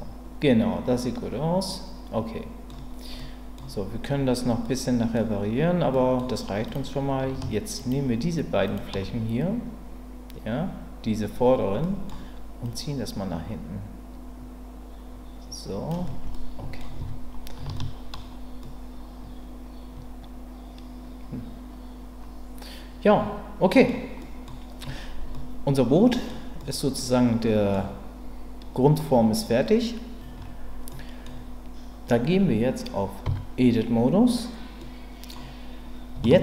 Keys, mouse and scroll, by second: 3.2 middle click, 4.6 middle click, 5.9 middle click, 7.8 shift+click, 8.6 shift+click, 11.8 middle click, 12.6-15.9 drag, 16.3 middle click, 17.0 Tab, 17.7-18.1 shift+middle drag, 18.6-23.8 middle drag, 24.2 middle click, 25.3-26.3 middle drag, 26.6-27.7 middle drag, 29.0-30.2 middle drag, 30.9 middle click, 33.2 Tab, 34.8 middle click, 36.2 shift+middle click.